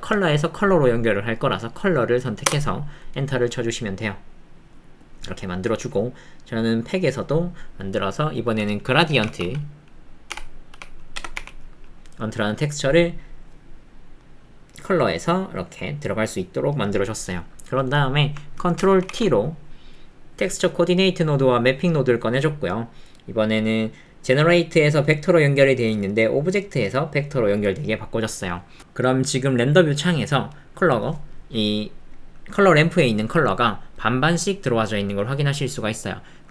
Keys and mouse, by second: 5.5 middle click, 6.8-15.1 drag, 26.8 click, 32.4 click.